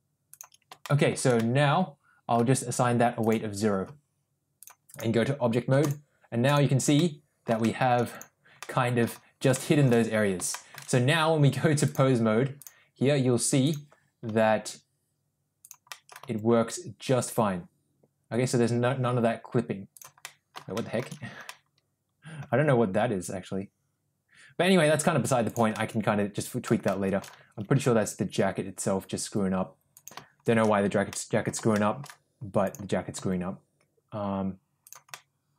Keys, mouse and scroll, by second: 0.3 click, 0.8 shift+middle click, 1.4 middle click, 3.2 click, 4.6-5.2 drag, 5.8 click, 7.0-7.4 middle drag, 7.6 shift+middle drag, 8.6-9.0 middle drag, 9.5 shift+middle drag, 10.5 shift+middle drag, 11.8-12.8 drag, 14.3 g, 16.0 middle click, 16.2 g, 20.3 middle click, 20.8 shift+middle drag, 21.6-22.4 middle drag, 22.6 g, 25.8 middle click, 27.0 shift+middle click, 27.4 g, 31.2-31.5 middle drag, 31.8 shift+middle drag, 33.2 g, 35.2 middle click.